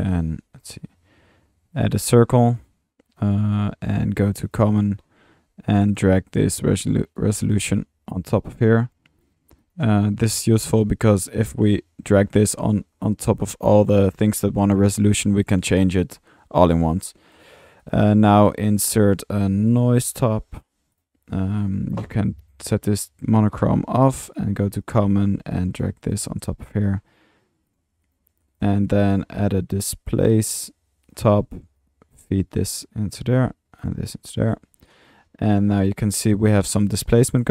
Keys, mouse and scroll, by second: 0.3-1.1 typing, 1.8 click, 2.6-3.0 typing, 2.6-2.9 drag, 2.9 middle click, 3.0 middle click, 4.4 click, 5.5 typing, 5.8 click, 6.3 click, 8.3-9.5 drag, 11.4 click, 17.0 click, 17.6 typing, 17.8-18.3 drag, 18.3 Tab, 19.0 Tab, 19.3-20.5 typing, 21.5 drag, 21.9 click, 23.0-23.6 drag, 24.3 click, 25.1 click, 26.8-27.9 drag, 28.4-28.8 drag, 29.1 Tab, 30.5 click, 31.1 click, 31.8-32.4 drag, 33.2-34.0 drag, 34.5 click, 35.8-37.2 middle drag.